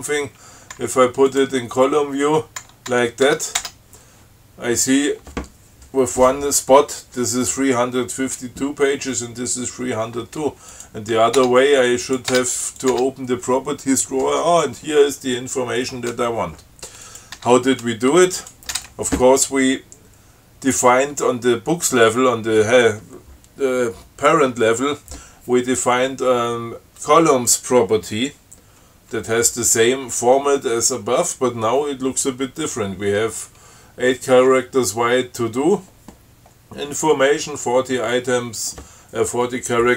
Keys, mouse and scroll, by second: 1.0 Tab, 1.5 click, 2.9 Tab, 11.0 click, 11.6 Tab, 12.3 click, 12.5 Tab, 13.0 click, 17.3 click, 17.6 Tab, 18.6 click.